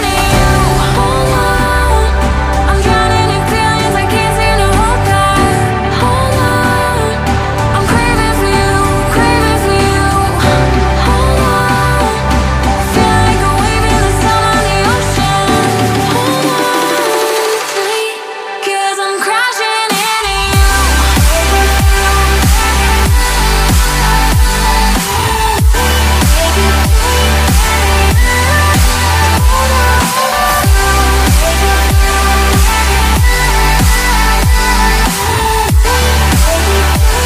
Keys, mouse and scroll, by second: 9.5 ctrl+click, 9.8 ctrl+click, 11.6-12.0 typing, 12.3 Tab, 26.5 double click, 27.5 ctrl+d, 30.4 double click, 31.2 Delete, 32.8 right click, 37.0 double click.